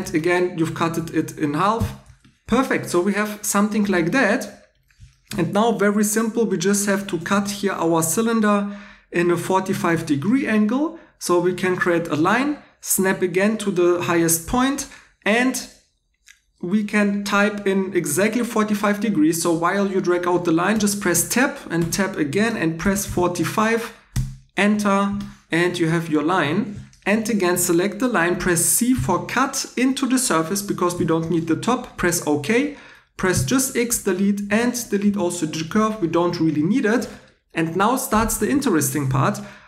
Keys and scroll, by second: 0.9 x, 1.7 x, 7.3 3, 20.7 Tab, 21.8 Tab, 22.6-23.5 typing, 24.1 Return, 28.9 c, 33.3 x, 34.4-35.0 typing.